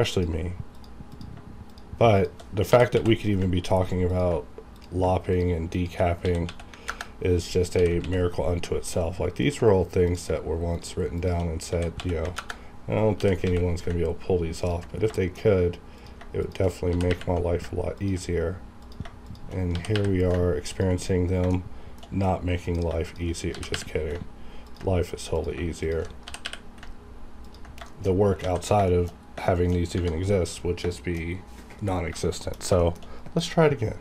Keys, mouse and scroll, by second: 0.1 ctrl+click, 0.7 click, 1.6 shift+click, 2.7 g, 3.0 x, 4.1 ctrl+click, 5.2 shift+click, 6.2 s, 6.5 x, 6.7 KP_0, 6.9 KP_Enter, 7.8 g, 8.0 x, 9.4 ctrl+click, 10.7 shift+click, 11.6-13.4 typing, 12.4 KP_Enter, 14.6 ctrl+click, 15.0 scroll down 1, 15.2 shift+middle click, 16.0 click, 16.3 shift+click, 16.9 g, 17.1 y, 18.0 ctrl+click, 19.3 shift+click, 19.7 g, 19.9 y, 20.7 ctrl+click, 21.3 scroll down 1, 21.5 shift+middle click, 22.5 click, 23.0 shift+click, 23.5 g, 23.7 y, 24.7 ctrl+click, 25.8 shift+click, 26.2 g, 26.4 y, 27.4 ctrl+click, 27.9 shift+middle click, 28.2 scroll up 1, 28.4 alt+a, 28.9 shift+middle click, 29.2 scroll down 1, 29.4 shift+middle click, 30.9 shift+middle click, 31.3-31.9 scroll up 1, 31.9 scroll down 1, 32.2 shift+middle click, 32.6 scroll down 1, 32.8 shift+middle click, 32.8 shift+middle click, 33.0 shift+scroll up 1.